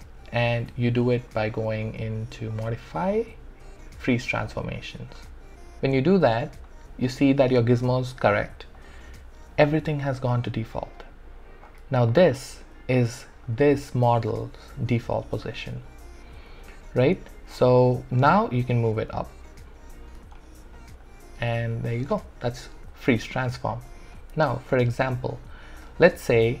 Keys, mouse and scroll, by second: 2.5 click, 5.2 click, 11.8 click, 12.1-17.1 alt+drag, 17.3-20.1 alt+drag, 20.3 alt+right click, 20.7 alt+click, 22.1 ctrl+z, 24.1-26.6 alt+drag.